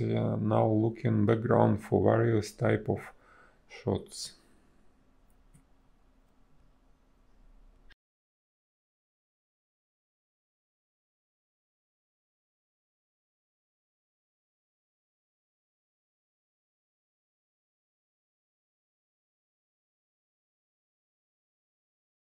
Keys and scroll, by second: 3.7 space, 4.6 b, 7.4 space, 9.6 ctrl+z, 13.8 a, 14.9 ctrl+z, 20.9 space.